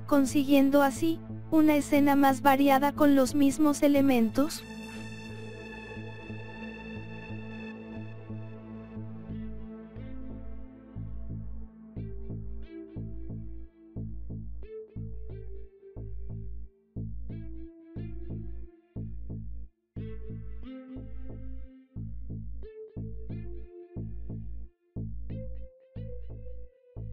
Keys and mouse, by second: 2.3 g, 7.0 KP_1, 10.1 KP_6, 10.6 KP_6, 10.7 KP_6, 12.0 KP_8, 13.8 KP_5, 17.8 g, 21.6-23.4 drag, 24.1-25.9 drag, 26.4-27.1 drag.